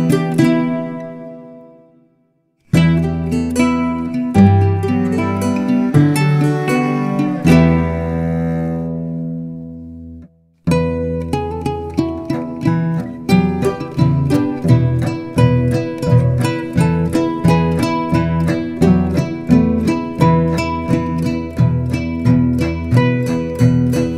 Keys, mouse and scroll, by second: 2.0-2.5 shift+middle drag, 2.5-3.1 scroll down 1, 3.8-12.1 drag, 15.6 g, 16.1 shift+middle click, 16.5 g, 17.2-18.3 drag, 19.2-20.3 drag, 20.7 click, 20.9 g, 21.7 g, 22.3 Tab, 22.6 click.